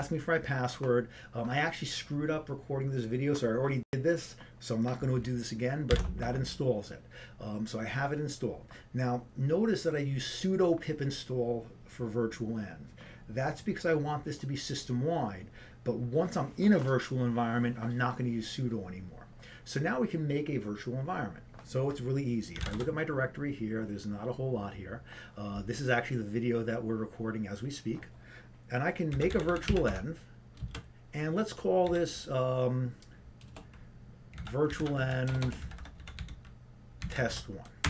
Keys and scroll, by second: 0.0 Return, 0.0 typing, 6.9 ctrl+c, 24.8-25.5 typing.